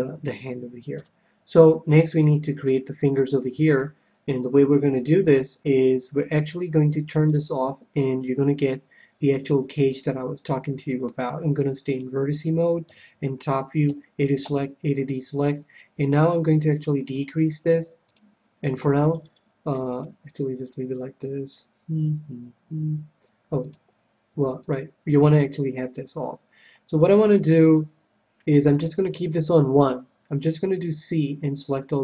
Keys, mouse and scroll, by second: 1.0 Tab, 1.6-5.1 middle drag, 7.1-8.9 drag, 8.7-10.3 middle drag, 11.8-13.5 drag, 12.8 KP_7, 13.9 a, 14.4 a, 16.7-19.7 drag, 20.0-21.8 drag, 23.6-26.4 drag, 30.1 c.